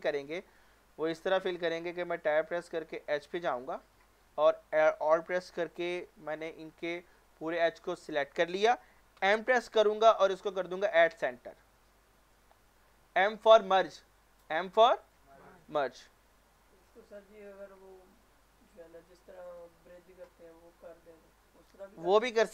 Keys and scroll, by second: 1.8 Tab, 4.4 Tab, 9.2 m.